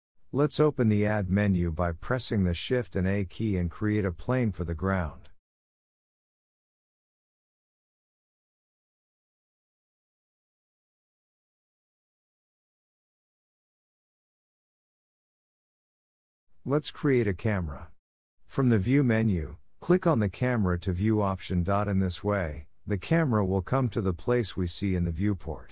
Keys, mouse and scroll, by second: 0.7 click, 1.2 shift+middle drag, 1.4-2.1 scroll up 1, 2.1-2.4 scroll down 1, 2.4-4.1 shift+middle drag, 4.1 click, 5.5 shift+a, 7.5 click, 7.8-8.6 scroll down 5, 8.6 shift+middle click, 8.8-9.3 scroll up 1, 9.3 s, 11.3 scroll down 1, 11.4-12.5 middle drag, 12.5 click, 12.9-13.5 scroll up 3, 13.5 shift+middle click, 14.0-15.8 scroll down 3, 16.3 shift+a, 20.9 click, 22.3 click, 24.0 KP_0, 24.8-25.7 scroll down 24.